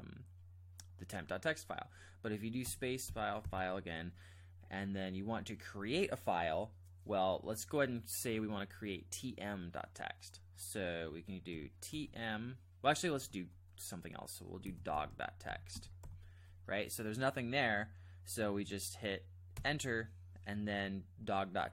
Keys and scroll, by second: 2.6 space, 3.0 f, 3.4 f, 11.5-11.9 typing, 13.0 typing, 14.4-16.5 typing, 19.5 Return.